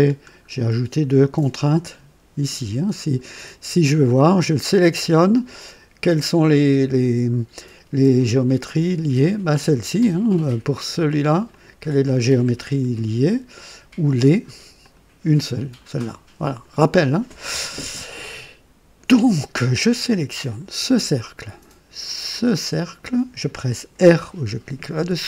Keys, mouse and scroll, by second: 4.7 click, 8.2 click, 11.4 click, 14.7 click, 16.3 click, 20.4 click, 22.6 click, 24.9 r.